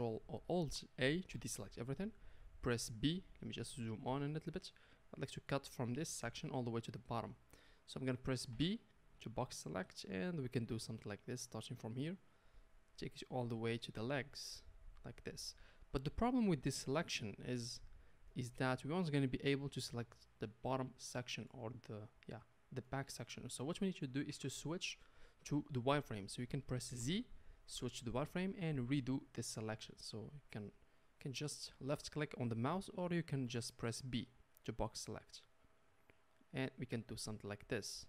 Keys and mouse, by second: 1.4 alt+a, 5.7-7.3 drag, 7.3-29.7 middle drag, 8.5 b, 24.5 KP_1, 27.0 z, 29.7-31.4 drag, 31.4-38.0 middle drag, 33.4 b.